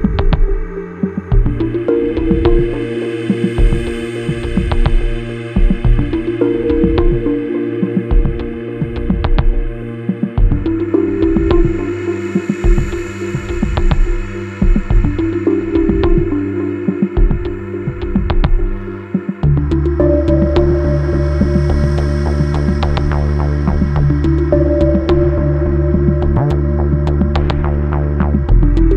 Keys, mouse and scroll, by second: 0.5 ctrl+click, 2.0 ctrl+r, 4.1 click, 8.2 click, 10.0 click, 11.8 click, 12.3 F4, 12.5 click, 13.5 F9, 19.0 click, 21.0 ctrl+o, 22.7-23.2 scroll up 1, 23.2 click, 24.2 click, 28.1 click.